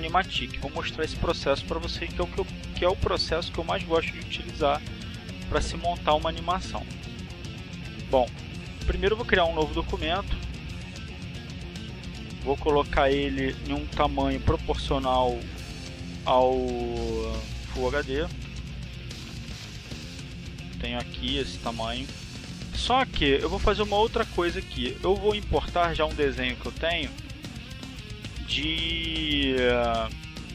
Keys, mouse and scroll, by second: 8.6 click, 10.6 click, 11.6-12.6 drag, 14.4 KP_4, 14.8 KP_8, 14.9 KP_0, 15.7 click, 17.4 KP_2, 17.7 KP_7, 17.8 KP_0, 18.9 click, 29.9 click.